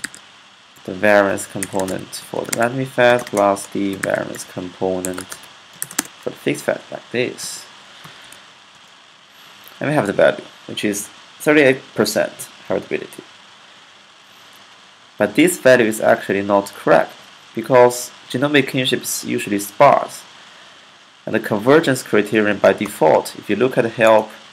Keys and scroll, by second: 0.0-5.5 typing, 0.6 alt+4, 7.6-8.4 typing, 21.9-23.4 typing.